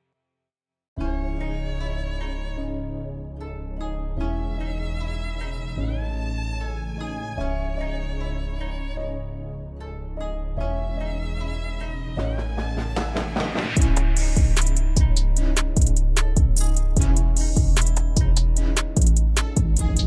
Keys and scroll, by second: 1.5 F4, 5.8 ctrl+z, 10.0 F4.